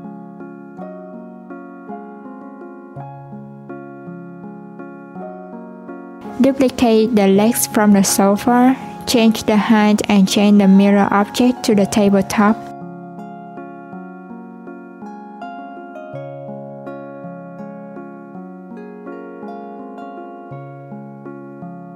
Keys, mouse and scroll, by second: 3.0 click, 4.2 click, 5.4 shift+d, 11.3 click, 13.0 g, 14.9 click, 15.3 click, 17.1 click, 19.1 click, 20.2 Tab, 20.7 alt+z, 21.1 click.